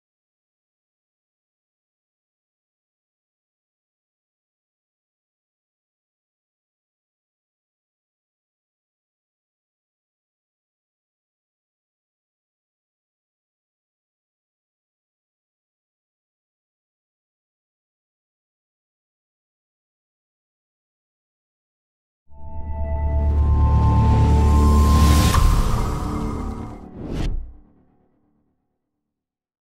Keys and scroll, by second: 10.5 ctrl+=, 13.4 ctrl+-, 13.9 ctrl+=, 17.0 ctrl+-.